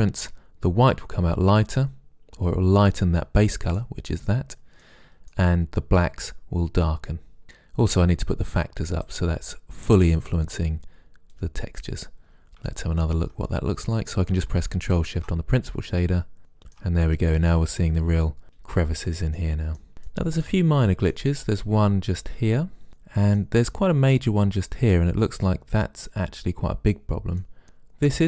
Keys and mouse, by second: 1.8-3.2 middle drag, 6.7 middle click, 8.5-9.9 drag, 11.5-13.3 drag, 14.5 middle click, 18.2-19.5 middle drag, 22.9 middle click, 25.0-27.5 middle drag.